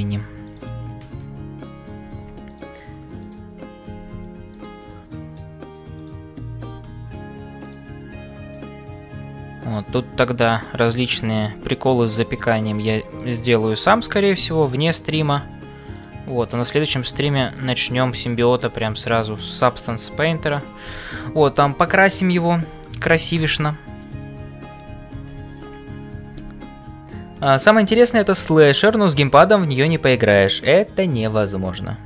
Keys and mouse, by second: 0.0-32.0 typing, 0.4 click, 3.2 click, 4.9 middle click, 6.0 click, 8.6-9.9 middle drag, 11.5-12.5 middle drag, 13.5 middle click, 14.8 middle click, 16.7 click, 19.2 middle click, 19.6 middle click.